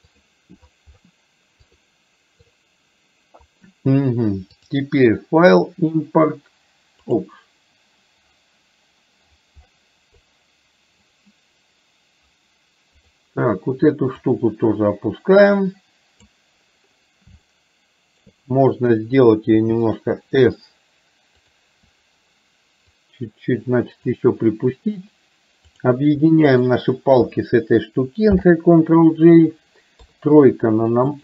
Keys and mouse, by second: 4.8-7.4 drag, 14.4-16.4 drag, 17.6-18.3 shift+middle drag, 22.9 click, 23.3 click, 26.6 shift+click, 28.4 ctrl+j, 30.1 KP_3.